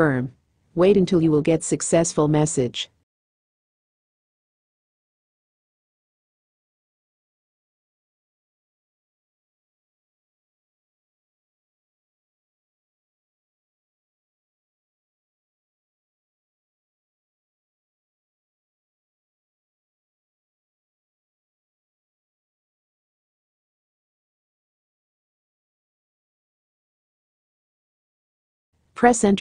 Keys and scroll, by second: 26.6 Return.